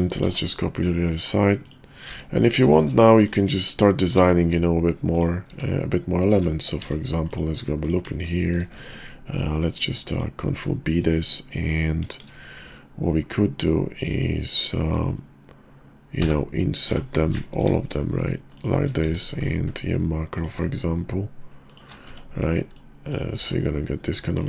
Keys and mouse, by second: 0.2 alt+x, 1.2 click, 1.7 click, 2.1 `, 2.7 shift+drag, 4.3 shift+drag, 5.5 Tab, 6.8 ctrl+r, 8.6 ctrl+b, 10.6 click, 11.3 click, 11.9 KP_5, 16.1 i, 19.3 q, 22.1 Tab, 22.6 middle click, 23.1 click, 23.4 q.